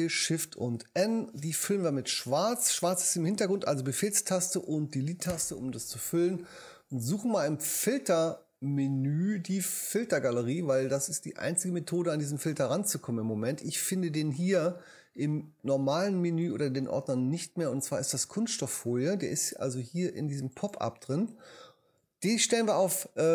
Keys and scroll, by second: 0.9 shift+super+Return, 1.9 shift+Return, 4.5 super+BackSpace.